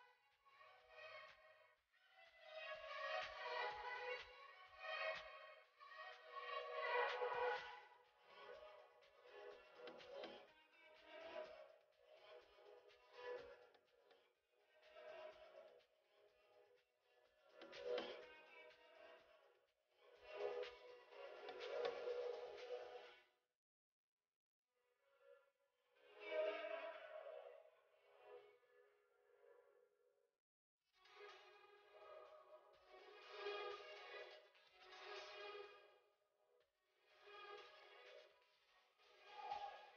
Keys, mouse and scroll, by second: 2.0 s, 3.4-8.0 drag, 13.9 click, 15.3-15.7 scroll up 1, 15.7 click, 20.0 click, 24.4 click, 28.3-30.6 drag, 31.7 click, 35.4 click, 38.1 click.